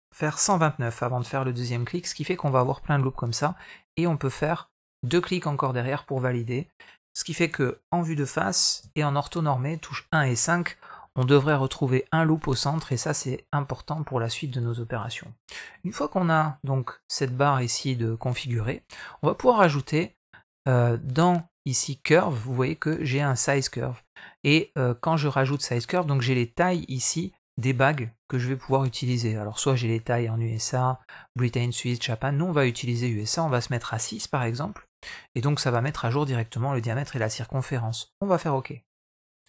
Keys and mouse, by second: 5.4-6.5 middle drag, 7.3 KP_1, 8.7 KP_5, 9.8 shift+middle click, 10.8 shift+middle click, 13.2-13.8 middle drag, 15.6 Tab, 22.0 click, 23.9-38.9 drag.